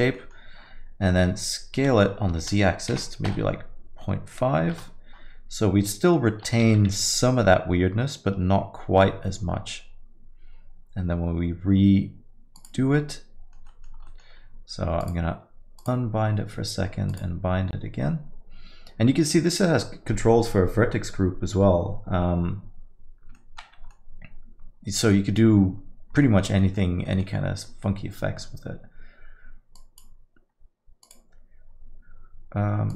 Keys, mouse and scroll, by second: 0.1 middle click, 1.8 s, 5.8 middle click, 6.6 g, 13.3 alt+middle click, 13.7 middle click, 13.9 scroll down 1, 14.1 alt+middle click, 15.0 click, 15.8 click, 17.1 click, 23.3 middle click, 23.6 scroll down 1, 23.9 alt+middle click, 26.2 middle click, 26.6 alt+middle click, 27.0 middle click, 27.4 scroll up 1, 29.7 click, 31.0 click.